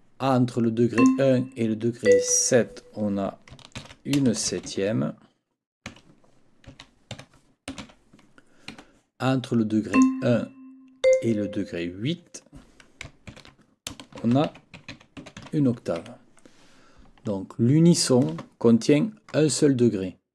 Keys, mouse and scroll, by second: 1.0 click, 2.0 click, 3.8 ctrl+t, 4.3 ctrl+shift+s, 4.5 ctrl+shift+e, 4.7 ctrl+shift+p, 5.9-8.3 typing, 8.7 Escape, 9.9 click, 11.0 click, 13.3 ctrl+t, 13.9-15.9 typing, 16.0 Escape.